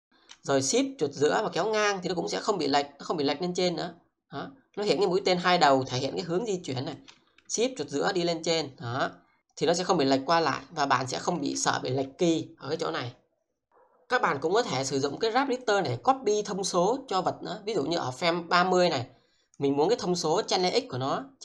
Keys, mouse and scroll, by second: 1.2-6.3 shift+middle drag, 7.6 shift+middle click, 15.6 click, 18.6 click.